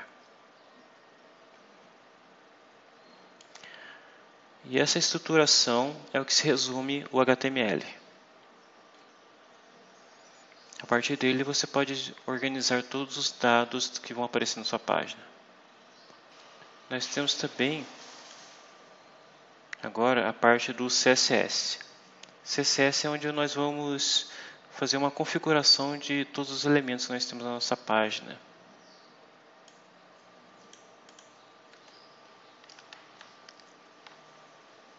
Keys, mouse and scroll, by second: 0.8-1.6 scroll up 2, 3.3-5.1 drag, 5.2 scroll up 1, 5.5 scroll down 1, 6.8-7.4 scroll down 2, 8.0 scroll up 2, 8.5-9.5 scroll up 6, 9.7-10.0 scroll up 2, 10.2 scroll up 2, 15.5 scroll up 2, 16.3-18.4 drag, 27.8-28.5 scroll down 3, 28.6 scroll up 2, 29.6-30.8 drag, 31.0 click.